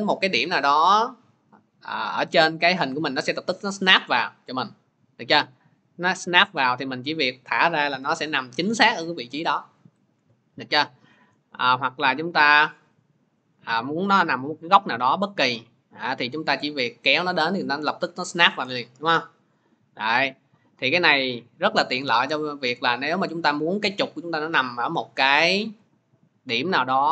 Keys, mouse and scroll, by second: 7.0 click, 10.0 ctrl+z.